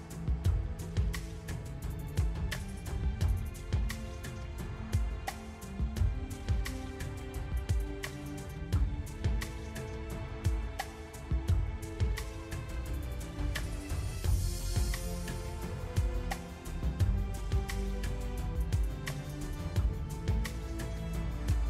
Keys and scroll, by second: 9.2 Tab.